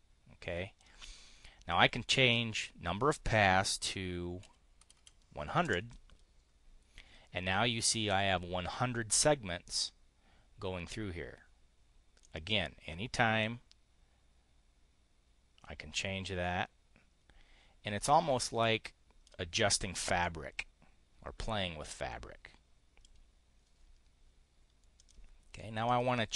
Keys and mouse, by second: 1.8 click, 4.4 1, 4.8 0, 5.6 Return, 12.2-19.3 drag, 20.2-23.1 drag, 24.9 click, 25.7 click.